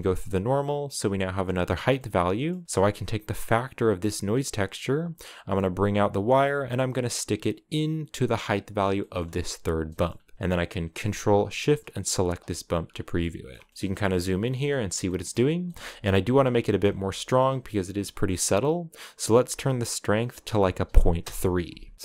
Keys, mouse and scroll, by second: 3.3-8.4 drag, 9.1-12.3 drag, 12.3-13.0 scroll up 4, 13.0 shift+middle click, 13.7-14.9 scroll up 2, 16.9 shift+middle click, 17.3-19.4 scroll up 4, 21.0 click, 21.8-22.0 scroll up 4.